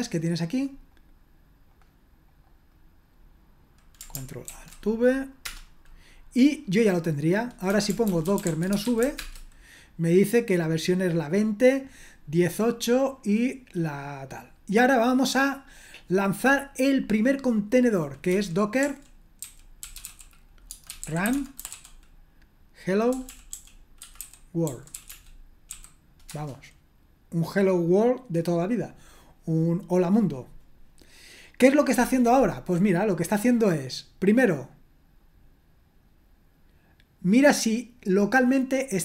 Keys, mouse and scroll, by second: 1.0 middle click, 1.7 click, 2.3 click, 2.7 click, 2.9 right click, 4.5 ctrl+alt+v, 5.5 Return, 7.4-9.5 typing, 13.0-13.9 scroll down 1, 13.9-15.8 scroll down 1, 15.8 click, 18.3-26.3 typing, 35.2-39.0 drag.